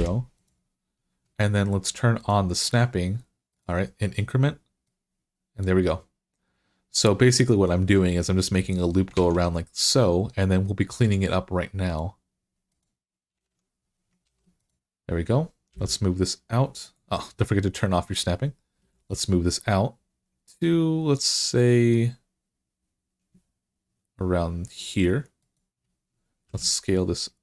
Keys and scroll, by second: 9.0 alt+z, 13.3 alt+z, 14.1 ctrl+r, 15.5 g, 18.6 g, 26.3 s.